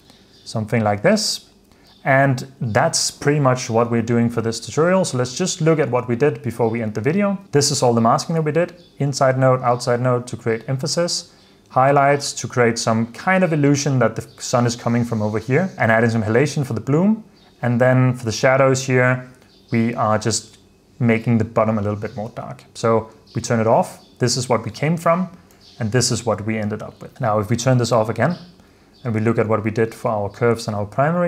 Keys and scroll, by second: 0.0 super+d, 1.0 super+f, 1.4 super+s, 22.3 super+f, 23.5 super+d, 25.7 super+d, 27.1 super+s, 28.5 super+d, 31.0 super+f.